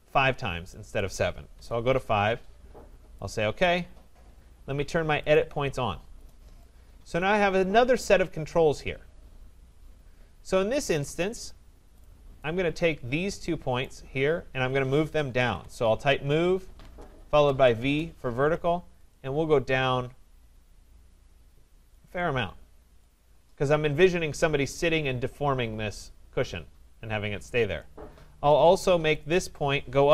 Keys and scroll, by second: 16.8 Return.